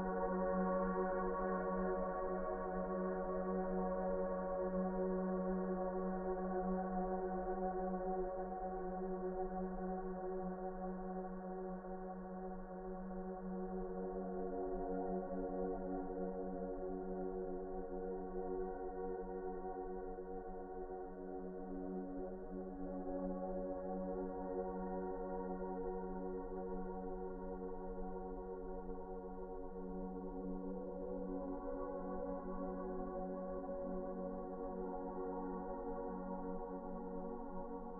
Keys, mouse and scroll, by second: 8.7 s, 13.0 s, 15.9 ctrl+z, 16.7 F4, 17.6 p, 18.2 F4, 19.6-23.9 typing, 22.2 ctrl+v, 25.5 F4, 31.0 ctrl+z.